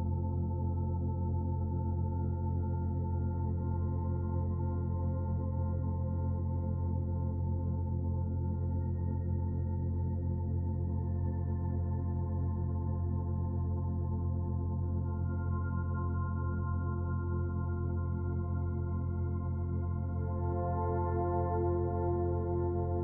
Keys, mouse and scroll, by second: 3.6 shift+middle click, 4.1 middle click, 5.4 click, 9.0 alt+click, 10.0 s, 12.5 click, 17.1 s, 19.4 e, 20.1 click, 22.8 middle click.